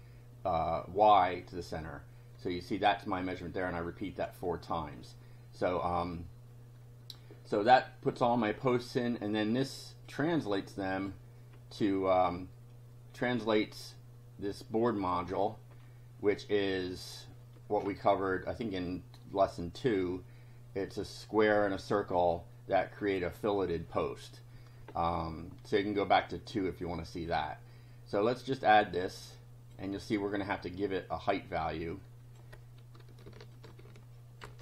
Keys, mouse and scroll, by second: 5.0 click, 10.2-11.2 drag, 11.5 scroll down 1, 13.4 click, 14.6 click, 15.8 scroll down 1, 20.9 click, 21.6 click, 27.2 scroll up 1, 28.6-29.9 drag, 31.0-32.5 drag, 33.6 shift+click, 34.4 ctrl+c.